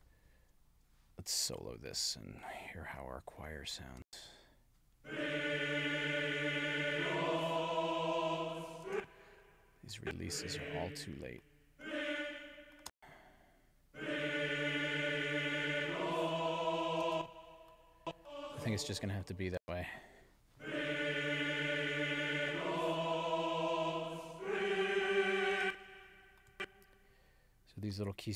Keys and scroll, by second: 4.0 space, 8.9 space, 12.9 space, 17.1 space, 19.6 space, 25.6 space.